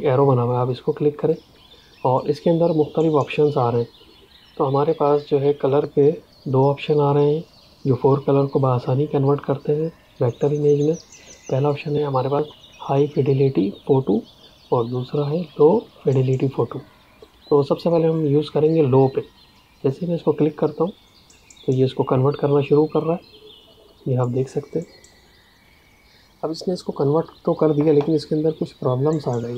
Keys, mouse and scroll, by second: 1.1 click, 19.7 click.